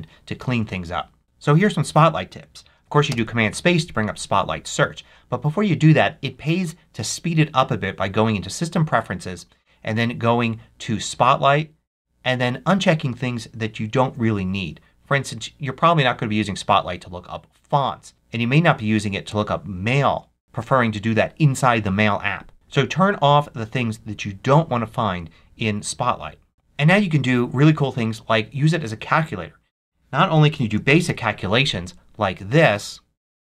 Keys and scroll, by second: 30.2-31.9 typing.